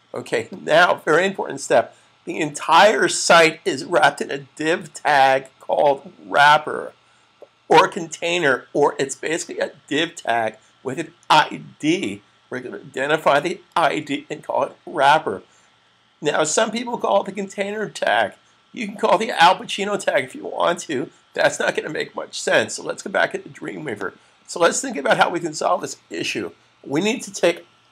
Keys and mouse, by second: 24.1 click.